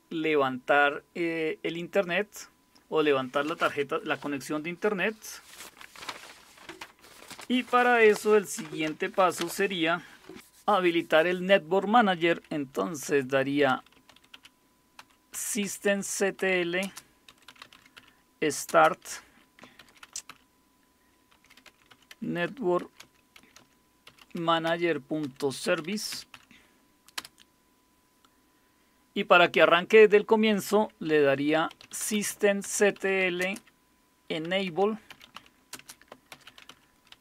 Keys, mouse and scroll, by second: 13.4-27.7 typing, 31.3-37.2 typing.